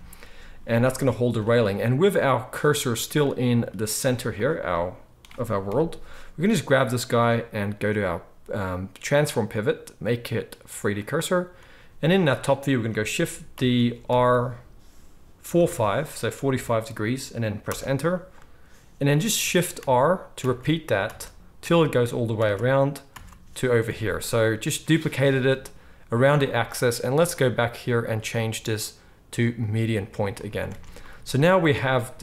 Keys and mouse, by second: 2.8-4.4 middle drag, 3.9 z, 4.4-5.6 drag, 4.4-5.6 right drag, 5.6 KP_7, 6.8-9.3 drag, 13.5 shift+d, 19.8-23.8 typing, 23.8 click, 23.8 right click, 24.7-25.1 middle drag, 30.7 alt+a, 31.5 ctrl+s.